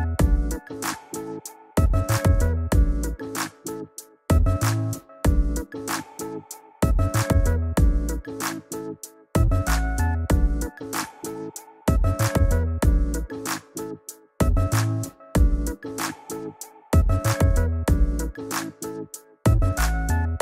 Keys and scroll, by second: 15.2 [.